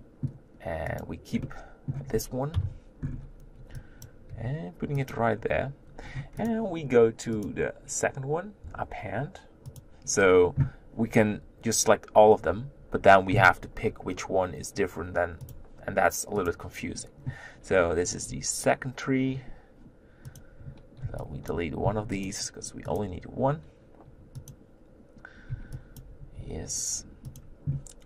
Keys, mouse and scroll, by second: 0.0 Delete, 0.0-1.0 middle drag, 1.0 click, 1.4-2.5 middle drag, 2.5 KP_1, 3.0-4.1 scroll up 4, 4.1 b, 4.3 g, 5.4-6.0 scroll up 1, 6.0-6.4 scroll down 4, 6.4 click, 9.9-19.4 drag, 20.3 click, 21.5 b, 22.2 x, 25.0 click, 25.1 click, 26.0 b, 26.4 g.